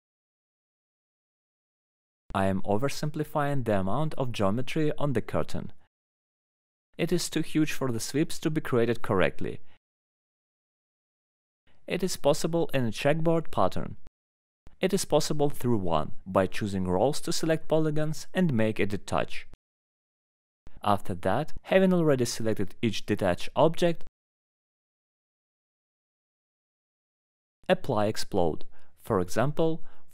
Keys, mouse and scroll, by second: 0.7 right click, 0.7-1.6 scroll, 1.0 middle click, 1.1 alt+middle click, 1.6 scroll down 4, 3.1 click, 4.7 click, 6.0 middle click, 6.8 ctrl+click, 7.5 scroll, 8.1 middle click, 8.9 ctrl+click, 9.1-9.5 scroll, 11.1 ctrl+click, 11.6 scroll, 12.7-13.1 scroll up 2, 13.1 ctrl+click, 13.5 scroll up 1, 14.7 ctrl+click, 15.0-15.9 scroll up 3, 16.0 alt+middle click, 16.0 scroll, 17.0 click, 18.1 click, 19.3 click, 20.5 middle click, 20.8 scroll, 21.2 click, 22.1 click, 24.8 click, 26.5 click, 28.6 click, 29.6 click.